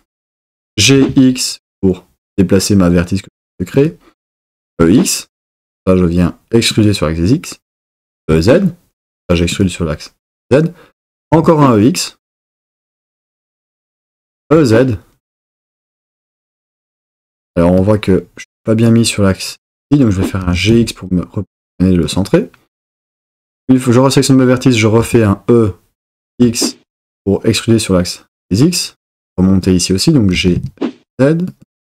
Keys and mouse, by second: 0.6 g, 1.0 x, 3.8 click, 4.6 e, 4.7 x, 7.9 e, 8.2 z, 9.6 click, 11.2 e, 11.4 x, 13.8 click, 14.2 e, 14.5 z, 17.3 click, 20.4 g, 20.8 x, 22.1 click, 25.0 e, 26.4 x, 30.3 g, 30.6 z, 31.6 click.